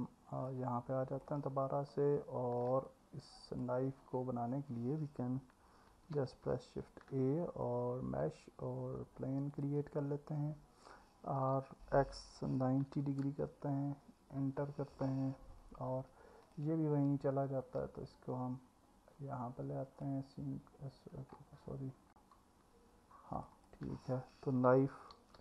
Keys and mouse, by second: 0.5 click, 2.9 click, 6.9 shift+a, 11.6 r, 12.2 x, 12.9 KP_9, 13.3 KP_0, 14.4 KP_Enter, 16.5 click, 17.6 drag, 23.4 click, 23.6-25.4 drag.